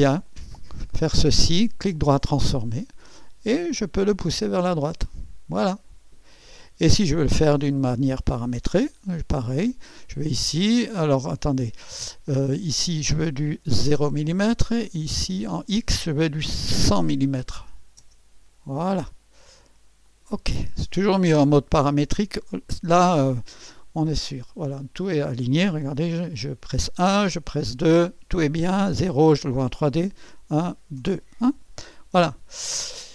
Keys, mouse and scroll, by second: 0.2 click, 1.0 right click, 2.0 click, 4.3 click, 6.3 click, 8.6 click, 9.5 click, 12.7 click, 13.9 KP_0, 14.8 click, 17.0-18.0 typing, 20.0 click, 23.6-25.6 drag, 25.7 1, 27.2 KP_2, 28.4 scroll down 1, 28.9 KP_0, 30.0-30.9 typing, 31.9 scroll up 1, 32.4 scroll down 1, 32.8 right click.